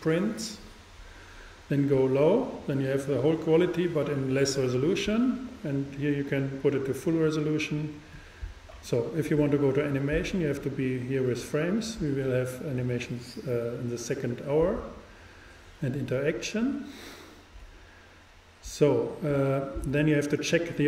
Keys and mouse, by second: 6.1-7.8 drag.